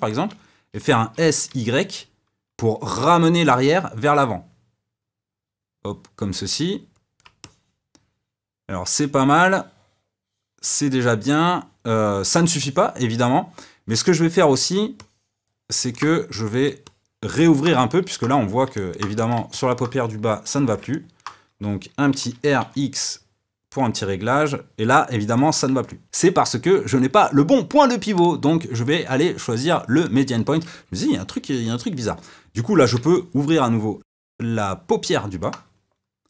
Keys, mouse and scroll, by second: 0.9 s, 7.3-10.4 middle drag, 12.5-16.4 middle drag, 16.4 click, 16.8-19.1 middle drag, 19.1 click, 19.4-22.0 middle drag, 22.0 r, 25.8 middle click, 28.1-33.1 drag, 33.1-36.1 middle drag.